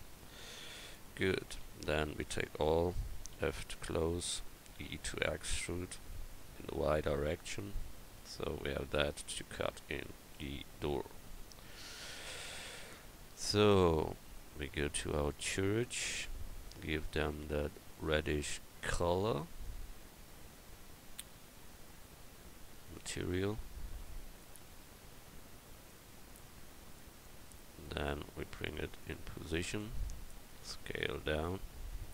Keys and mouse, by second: 1.2 Tab, 1.9 a, 2.1 a, 3.3 f, 4.8 e, 8.2 Tab, 12.7 KP_1, 14.3-24.1 drag, 30.9 s.